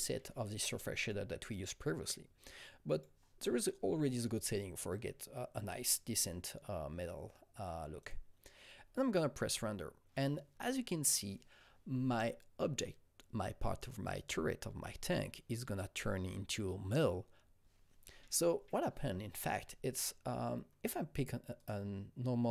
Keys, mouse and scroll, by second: 0.6-13.3 drag, 21.6-22.5 drag.